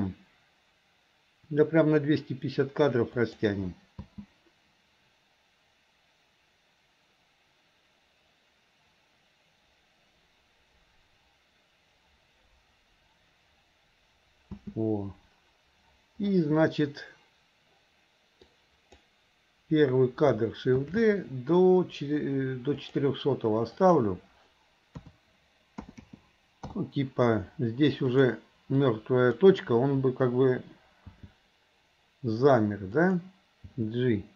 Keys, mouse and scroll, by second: 0.2 s, 4.1 space, 15.0 space, 18.5 click, 20.8 shift+d, 23.8-26.8 drag, 26.0 KP_0, 28.2 click, 28.8 click, 31.2 g.